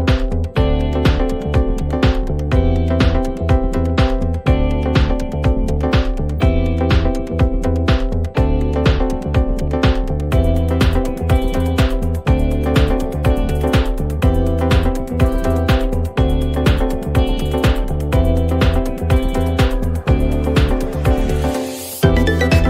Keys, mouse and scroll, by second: 1.0 click, 2.0 ctrl+d, 5.6 click, 7.8 click, 7.9 click, 14.0 click, 15.4 click, 19.1-19.9 drag, 21.7 u, 22.2 u.